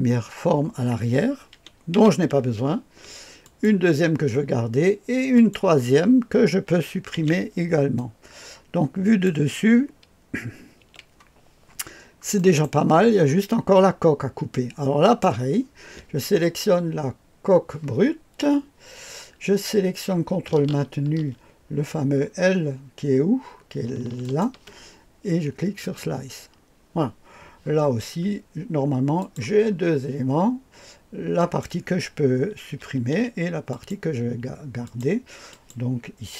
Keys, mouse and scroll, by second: 1.9 Delete, 3.4 click, 5.3 click, 7.1 Delete, 7.9-9.3 drag, 10.8 KP_2, 11.9-12.6 scroll up 1, 12.3 middle click, 13.0-15.0 scroll up 1, 15.0 click, 21.5-22.0 scroll down 1, 23.1-23.7 scroll down 1, 24.2 ctrl+click, 25.8 click, 27.9-29.2 scroll down 1, 29.2 click, 29.6-30.1 scroll down 1, 31.3 click, 32.8 Delete, 33.7 click, 34.8-36.2 drag.